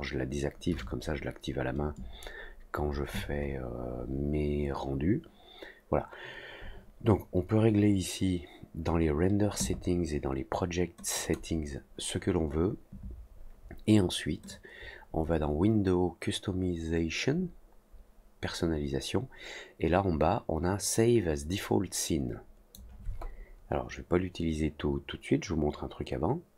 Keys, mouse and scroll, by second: 11.1 click, 14.4-22.7 drag.